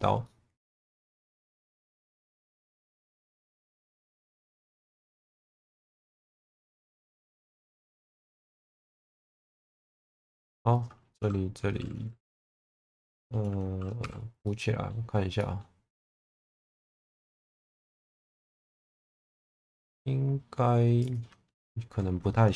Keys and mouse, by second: 0.2 middle click, 2.3 middle click, 3.0 1, 3.4 click, 3.7 middle click, 4.8 click, 5.6 ctrl+z, 6.0 shift+Tab, 6.4 click, 7.4 click, 8.2 click, 9.0 middle click, 10.0 2, 10.2 click, 14.0 f, 14.4 middle click, 15.3 middle click, 17.8 2.